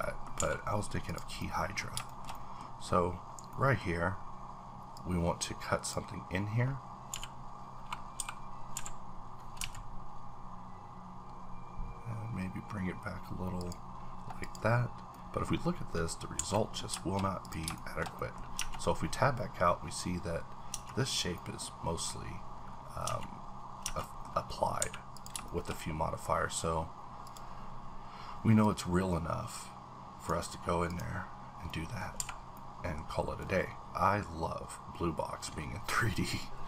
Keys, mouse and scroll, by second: 0.4 a, 0.7-1.1 scroll down 1, 1.1 click, 1.4 middle click, 2.1 shift+middle click, 2.6-3.2 scroll up 1, 3.2-3.5 scroll down 1, 3.5 middle click, 4.9-8.2 drag, 7.1 v, 8.2-9.6 typing, 11.3-12.2 scroll down 3, 12.2-13.5 scroll down 1, 13.6 click, 14.4 click, 15.1 middle click, 15.5-16.0 scroll up 3, 16.2 scroll down 1, 16.4 a, 16.5 middle click, 17.4 click, 17.7 shift+middle click, 18.5 Tab, 18.8-19.4 scroll down 1, 19.4-20.7 scroll down 5, 20.7 Tab, 21.3 middle click, 22.6-23.0 scroll up 2, 23.0 Tab, 23.8 Tab, 24.0 middle click, 24.3-24.8 scroll up 2, 24.8 a, 25.1 click, 25.4 shift+middle click, 25.7-26.6 scroll up 1, 26.6-27.2 scroll up 2, 27.2 click, 28.9-30.5 drag, 31.6 scroll up 1, 31.7 middle click, 32.1 scroll down 1, 32.2 a, 32.5-35.5 middle drag, 32.8 scroll down 1, 35.5-36.1 scroll down 6, 36.1 middle click.